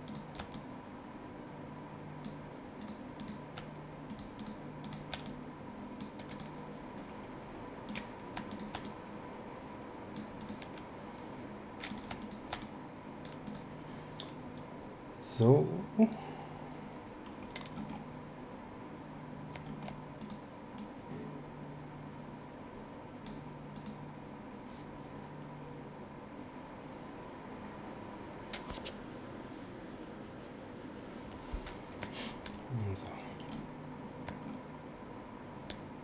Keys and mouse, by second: 2.8 click, 4.1 shift+click, 6.3 click, 7.9 click, 8.5 shift+click, 10.4 click, 11.9 click, 12.2 shift+click, 20.2 click, 23.7 click.